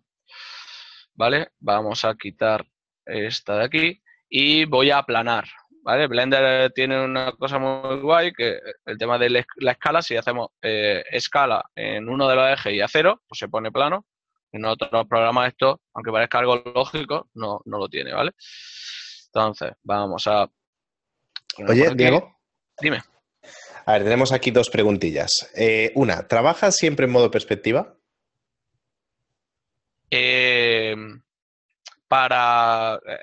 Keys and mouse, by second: 1.4 shift+middle click, 16.7 Return, 22.0 click, 26.1 shift+middle click, 28.0 z, 28.7 click, 29.5 right click.